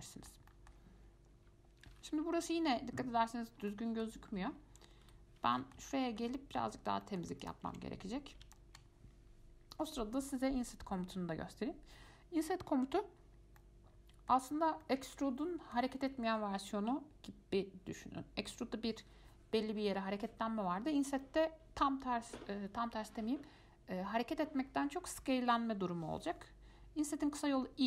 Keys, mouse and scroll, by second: 0.1-3.7 middle drag, 3.9-5.2 middle drag, 5.2 F5, 5.7-7.0 middle drag, 7.0 scroll up 1, 7.2 shift+middle click, 7.6 click, 7.9 Tab, 8.7-11.8 shift+middle drag, 13.5 scroll down 1, 13.8-14.8 middle drag, 14.8 scroll up 1, 15.0-18.0 middle drag.